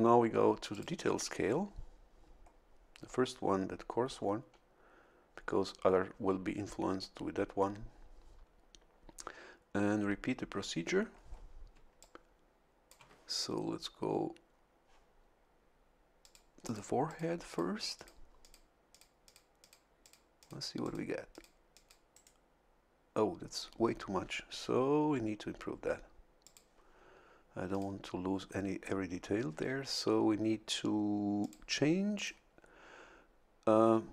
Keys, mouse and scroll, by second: 0.7 click, 11.7 a, 12.0-13.4 drag, 16.2 click, 16.6 click, 17.1 click, 17.5 click, 17.9 click, 18.4 click, 18.9 click, 19.2 click, 19.6 click, 20.0 click, 20.4 click, 20.8 click, 21.3 click, 21.7 click, 26.4 click, 27.7 click, 31.4 click, 32.1 click.